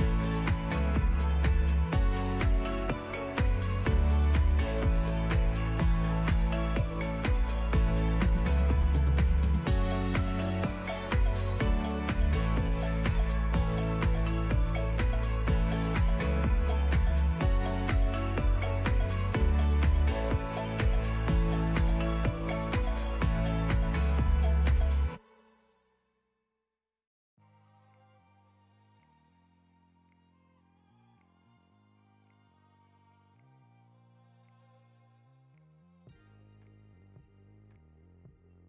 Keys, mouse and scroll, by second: 0.2 shift+click, 0.6 shift+click, 0.7 Tab, 0.8 a, 1.0 middle click, 1.4 Tab, 1.6 click, 2.1 click, 2.3 shift+click, 2.6 shift+click, 2.9 shift+click, 3.2 q, 3.6 click, 3.8 ctrl+z, 4.0 click, 5.3 shift+click, 5.4 Tab, 5.6-6.9 typing, 6.2 Tab, 6.3 Tab, 6.5 Tab, 6.6 Tab, 6.8 click, 7.2 Tab, 7.2 click, 7.3 click, 7.7 Tab, 7.8 Tab, 8.1 ctrl+click, 8.3 Tab, 8.4 Tab, 8.6 ctrl+click, 8.8 scroll down 1, 8.9 middle click, 9.1 Tab, 9.1 Tab, 9.3 shift+click, 9.4 Tab, 9.7 KP_1, 9.8 scroll up 1, 9.9 1, 10.0 click, 10.6 g, 11.3 middle click, 11.4 scroll down 4, 11.6 click, 11.7 click, 11.9 click, 12.0 shift+click, 12.1 z, 12.7 click, 13.0 Tab, 13.1 a, 13.2 shift+s, 13.3 Tab, 13.4 click, 13.7 right click, 14.0 click, 14.1 right click, 14.9 click, 15.1 right click, 15.8 click, 16.0-19.1 typing, 17.5 click, 18.0 middle click, 18.6 middle click, 19.0 click, 19.4 shift+click, 19.5 shift+click, 19.8 ctrl+p, 20.1 click, 20.2-21.6 typing, 20.8 scroll down 1, 21.5 click, 22.6 click, 22.9-25.9 typing, 23.4 ctrl+click, 25.4 click, 26.3 click, 27.4-28.9 drag, 29.1-32.2 typing, 33.4 click, 33.5 g, 34.6 ctrl+b, 35.1 click, 36.0 click, 36.4 z, 36.6 scroll up 1, 36.8-37.1 scroll down 1, 37.1 h, 37.8 g.